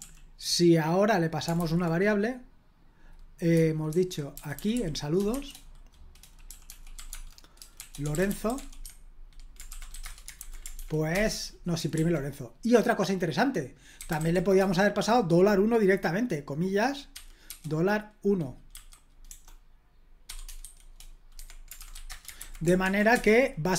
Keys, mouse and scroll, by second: 0.0 super+l, 1.5 super+h, 3.9 super+l, 4.3-10.4 typing, 10.7 ctrl+p, 11.1 Return, 11.9 super+l, 13.7-14.6 typing, 17.1-17.4 typing, 18.7 a, 20.2-22.2 typing, 21.3 Escape, 22.3 super+h, 22.8 ctrl+p, 23.1 Return.